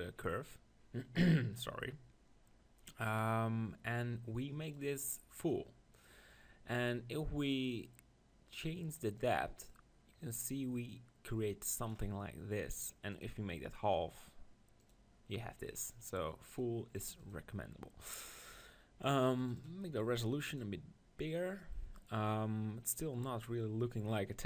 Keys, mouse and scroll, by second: 5.5-6.5 drag, 9.5-11.0 drag, 14.9 click, 17.3 click, 18.0-20.6 middle drag, 19.5-22.3 drag, 22.3 middle click.